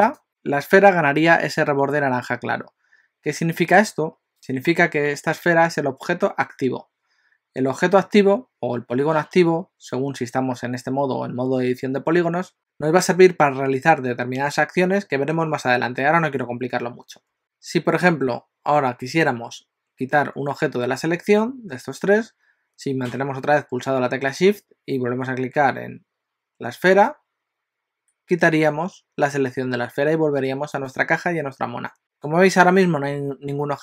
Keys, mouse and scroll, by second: 0.1 shift+click, 3.0-3.5 scroll down 1, 3.5 middle click, 3.5 scroll down 1, 26.9 shift+click, 30.0 g.